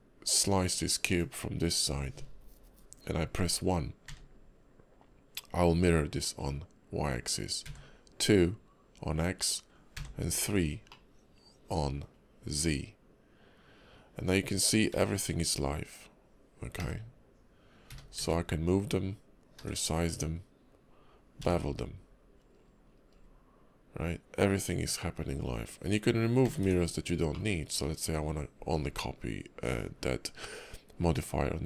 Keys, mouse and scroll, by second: 0.4 click, 10.9 middle click, 27.3 middle click.